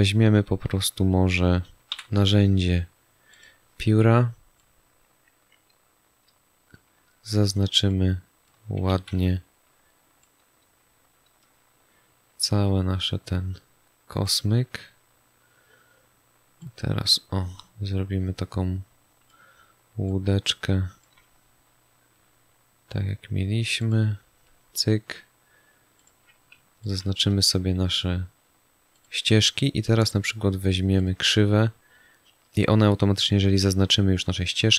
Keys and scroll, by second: 1.8 p, 8.8 ctrl+z.